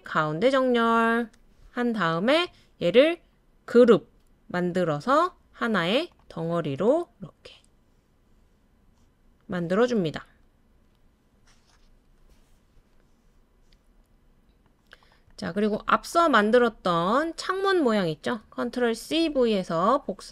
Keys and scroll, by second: 18.6 super+c, 19.0 super+v.